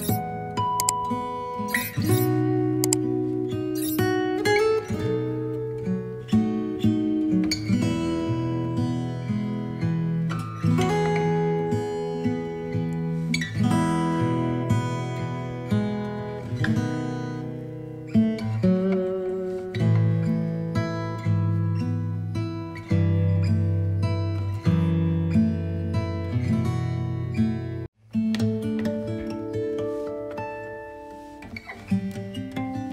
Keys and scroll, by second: 14.7 space, 18.2 typing, 20.6 ctrl+j.